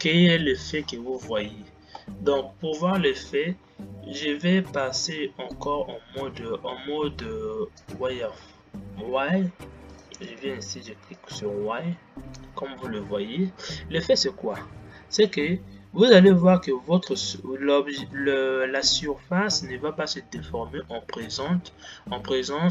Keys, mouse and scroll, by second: 1.6 space, 2.5 space, 11.8-12.9 drag, 12.9 space, 13.9-16.3 scroll up 5, 16.3-22.3 middle drag, 22.3-22.7 scroll down 3.